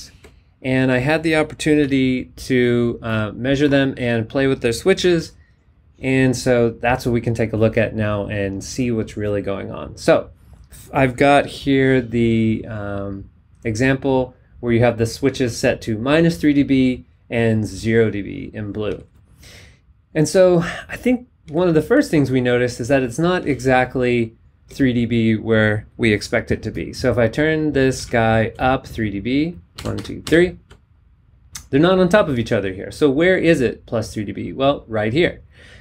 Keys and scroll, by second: 1.8 b, 5.0 b, 18.8 z, 21.4 z, 23.4 z, 24.6 z, 27.9 z, 29.7 super+Up.